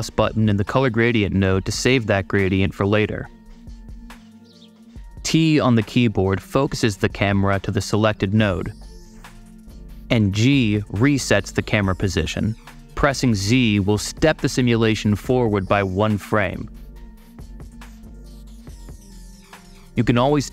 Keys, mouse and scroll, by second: 1.4 click, 5.9 t, 10.9 g, 13.6 z, 17.9-18.7 typing, 19.4 super+z.